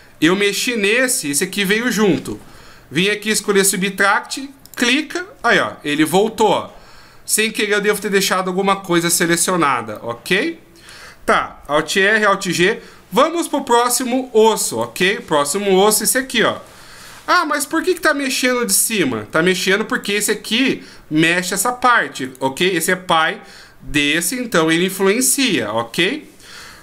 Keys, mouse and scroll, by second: 4.6 click, 6.1 middle click, 9.9 middle click, 11.8 alt+r, 14.7 right click, 16.5 r, 19.9 right click, 22.2 right click, 26.6 r.